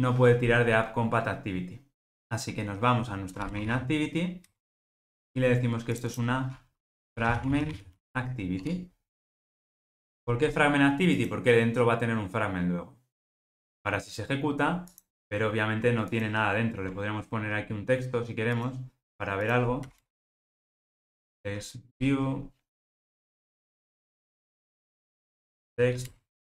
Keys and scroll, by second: 8.7 Tab, 16.2 super+b, 16.6 super+b, 22.1 Return.